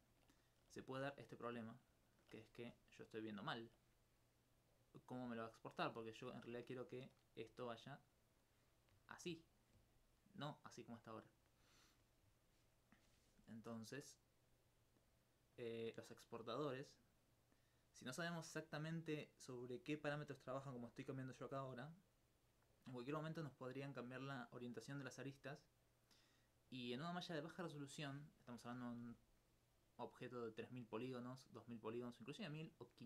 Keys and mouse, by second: 1.0 right click, 1.4 alt+click, 1.8 alt+click, 2.8 alt+click, 3.5 alt+click, 4.8 right click, 5.5 alt+click, 7.5 d, 8.0 d, 8.4 click, 10.2 click, 10.3 click, 11.1 right click, 13.7-27.1 drag, 29.5 middle click.